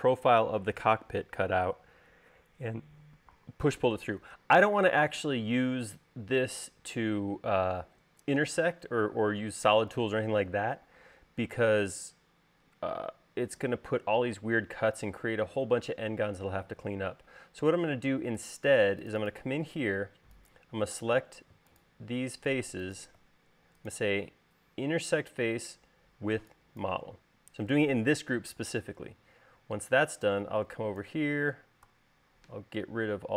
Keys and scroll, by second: 32.7 BackSpace.